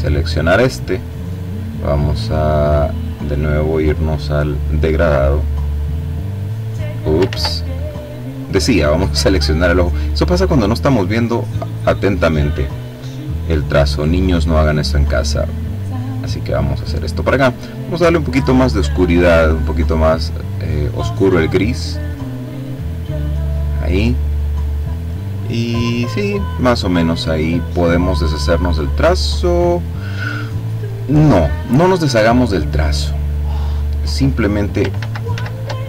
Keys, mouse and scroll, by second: 3.7 click, 5.0-6.6 drag, 6.7 ctrl+z, 7.4 click, 8.2 click, 9.2 click, 9.9 click, 10.5 click, 12.6 click, 14.5-17.0 drag, 17.6 click, 19.8-23.1 drag, 25.4 click, 27.4 click, 28.2 click, 32.4 click, 34.3 ctrl+z.